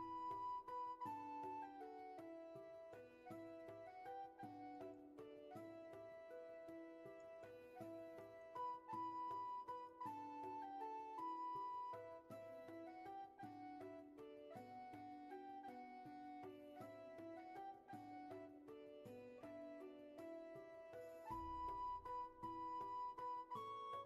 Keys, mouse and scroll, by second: 13.1 ctrl+z, 16.3 ctrl+shift+z, 19.4 ctrl+shift+z, 19.9 ctrl+z, 21.7 ctrl+z.